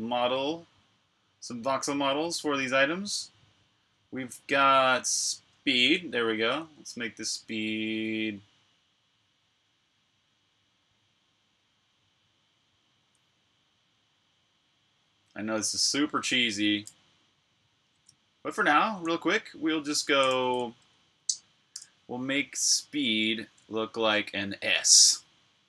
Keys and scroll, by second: 20.1 super+a, 21.7 BackSpace.